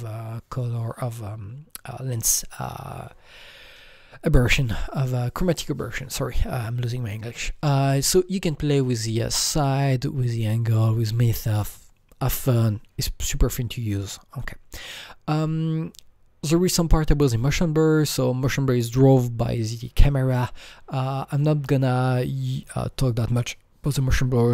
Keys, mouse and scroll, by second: 14.3 click.